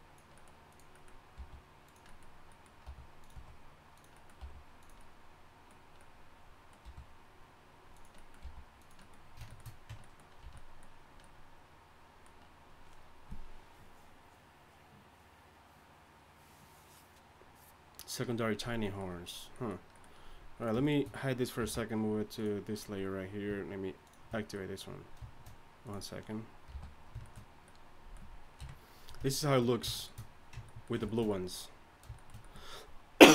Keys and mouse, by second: 1.4 g, 2.8 r, 3.3 s, 4.4 g, 6.8 r, 8.4 g, 9.9 Tab, 10.4 a, 20.6 right click, 21.6 m, 26.7 h, 28.6 KP_1.